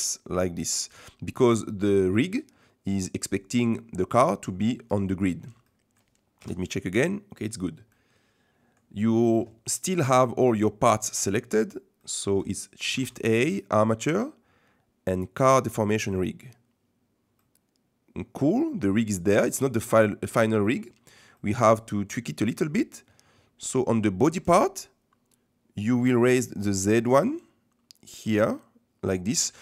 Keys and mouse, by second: 1.0 middle click, 3.9 middle click, 4.8 middle click, 5.7 middle click, 6.4 KP_1, 7.9-9.0 middle drag, 12.1 middle click, 12.9 shift+a, 17.4-19.3 middle drag, 20.3 middle click, 21.3 shift+middle click, 27.3-29.4 middle drag.